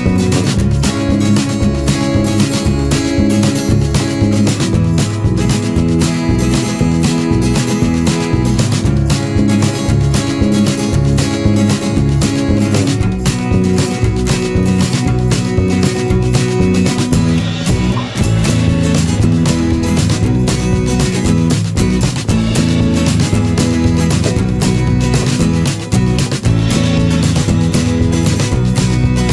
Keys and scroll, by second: 7.1 ctrl+=, 7.7 ctrl+=, 10.5 ctrl+z, 20.0 ctrl+z, 28.4 ctrl+-, 28.8 ctrl+0.